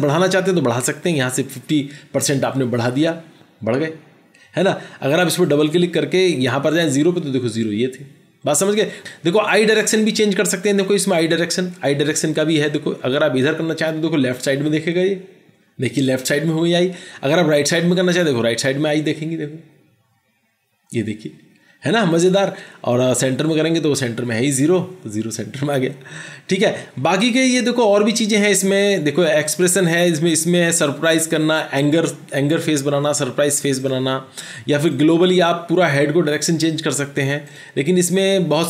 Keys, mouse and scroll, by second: 5.6 double click, 23.2 double click.